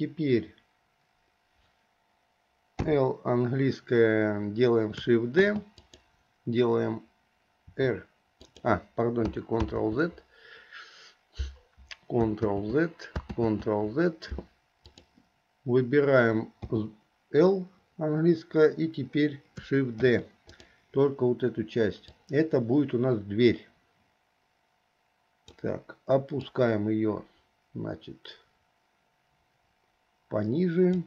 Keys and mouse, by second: 3.0 l, 5.6 shift+d, 7.9 r, 9.8 ctrl+z, 12.7 ctrl+z, 13.5 ctrl+z, 15.0 click, 16.9 l, 20.2 shift+d, 22.4-25.7 drag, 26.7-31.0 drag.